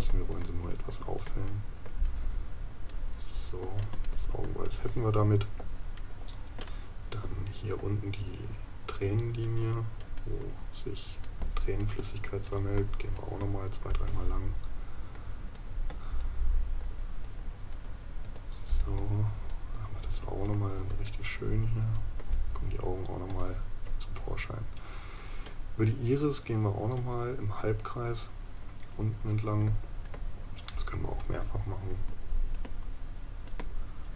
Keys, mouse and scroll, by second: 6.0 right click.